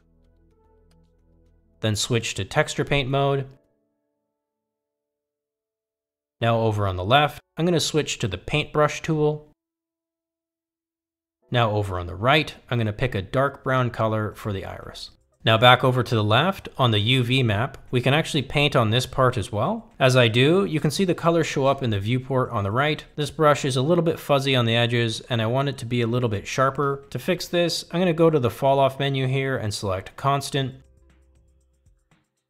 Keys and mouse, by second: 2.9 ctrl+Tab, 7.5 shift+middle click, 8.3 shift+middle click, 10.4 click, 13.5 click, 18.7-19.2 drag, 22.8 ctrl+z, 31.9-32.4 drag.